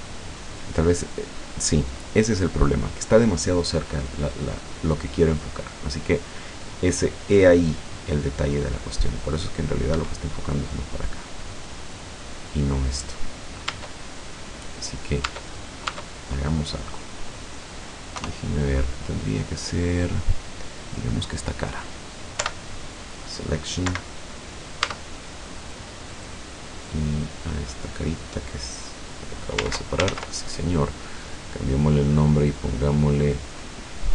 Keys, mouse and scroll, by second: 10.0 Escape, 11.0 right click, 11.9 right click, 13.7 Tab, 14.8 right click, 15.3 Tab, 15.5 right click, 16.6 middle click, 16.7 click, 17.1 middle click, 18.2 KP_0, 20.9 right click, 22.5 p, 23.2 click, 23.9 Escape, 24.9 Tab, 25.7 right click, 26.1 right click, 26.8 right click, 29.1 click, 30.1 ctrl+z, 31.5 click, 32.2 click, 32.9 click, 33.6 click.